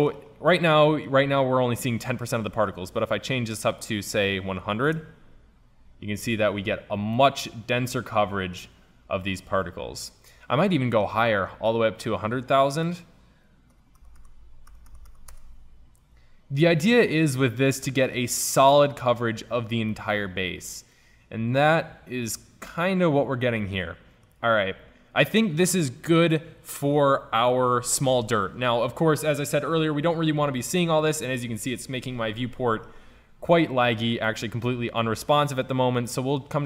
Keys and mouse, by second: 0.9 middle click, 3.8-4.8 drag, 4.8 KP_0, 8.2 middle click, 14.5 KP_0, 15.4 KP_0, 19.6-21.2 middle drag, 28.9-30.6 middle drag, 32.3-34.0 middle drag, 34.3-35.6 middle drag.